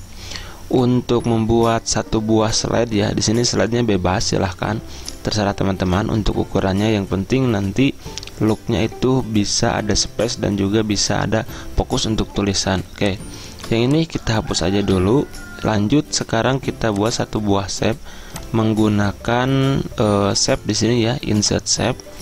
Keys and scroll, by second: 14.9 Delete.